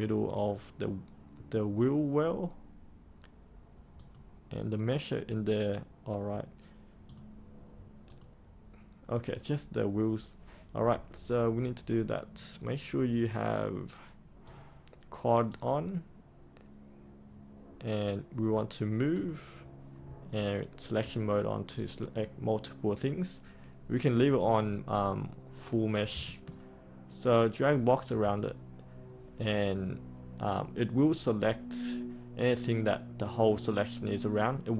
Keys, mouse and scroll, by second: 3.9 click, 26.4 ctrl+right click.